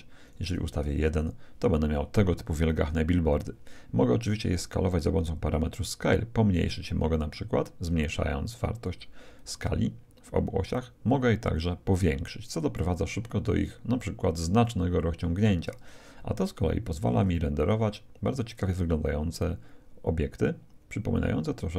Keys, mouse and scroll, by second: 0.4-2.1 drag, 4.0-6.1 middle drag, 5.5-7.1 drag, 9.3-11.0 drag, 11.1 click, 13.1-15.8 middle drag, 14.6-16.4 drag.